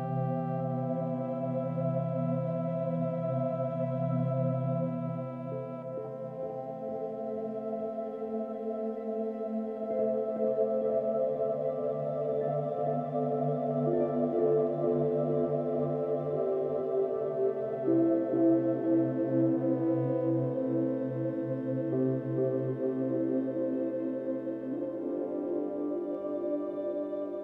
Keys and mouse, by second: 0.0 shift+s, 1.8-2.8 drag, 5.2 i, 6.1 click, 6.6 click, 7.5 shift+s, 8.8 click, 10.5 s, 11.0-12.4 drag, 12.4 typing, 13.4-14.3 drag, 14.9-15.4 typing, 15.4-16.9 drag, 17.0-17.9 typing, 17.9-18.8 drag, 19.4 typing, 19.7 click, 21.6 space, 22.4 space, 23.6 click, 23.8 space, 24.8 space.